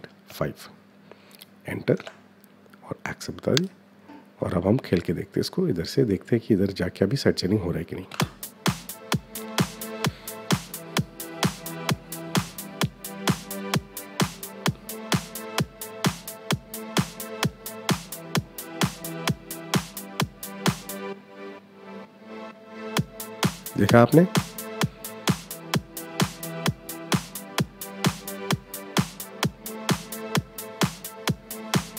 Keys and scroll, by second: 1.6 Return, 7.8 space.